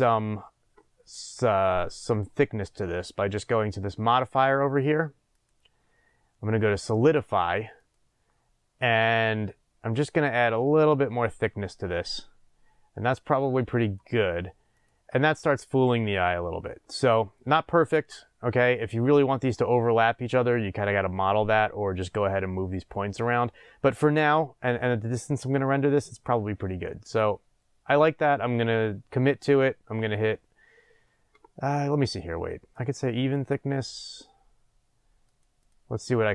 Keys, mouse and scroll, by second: 1.2-2.4 scroll up 1, 2.4-3.3 scroll up 1, 5.3-14.8 drag, 15.3 scroll down 1, 16.2 scroll up 1, 33.3 click, 33.8 click, 35.2 click, 35.6 click.